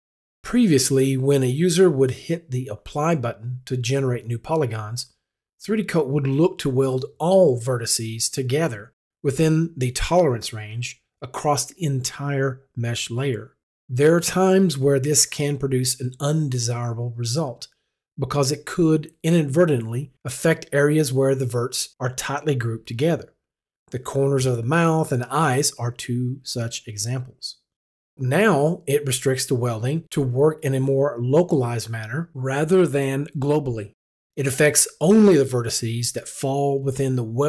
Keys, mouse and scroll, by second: 0.7 click.